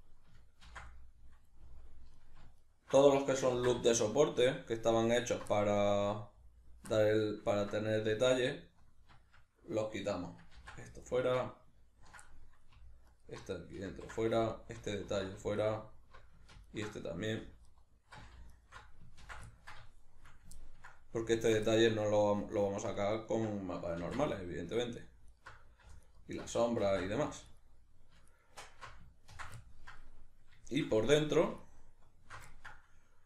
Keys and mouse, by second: 0.7 ctrl+x, 2.2 alt+right click, 2.6 alt+shift+right click, 3.5 ctrl+x, 3.9-5.1 shift+middle drag, 5.1 alt+right click, 5.5-8.3 ctrl+middle drag, 8.3 alt+right click, 10.6 ctrl+x, 11.1 alt+right click, 12.3 middle click, 13.1 alt+right click, 13.9 ctrl+x, 14.5 alt+right click, 15.1 ctrl+x, 15.6 alt+right click, 16.7 ctrl+alt+right click, 17.7 alt+right click, 18.5 alt+shift+right click, 19.2 ctrl+x, 19.5-21.4 ctrl+middle drag, 21.4 alt+right click, 21.6 ctrl+middle click, 22.5 alt+right click, 23.0-25.3 ctrl+middle drag, 24.0 ctrl+x, 25.3 alt+right click, 26.0 alt+right click, 26.9 ctrl+x, 27.5 alt+right click, 28.3 alt+shift+right click, 28.7 alt+shift+right click, 29.3 ctrl+x, 29.7-31.6 ctrl+middle drag, 31.6 alt+shift+right click, 32.5-33.2 ctrl+middle drag.